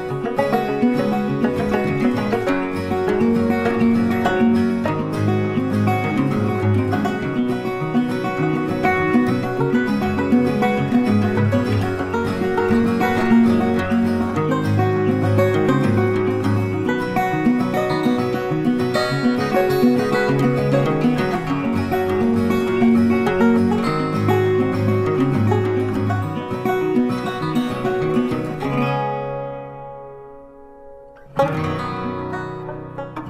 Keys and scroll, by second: 1.4 ctrl+t, 15.8 ctrl+t.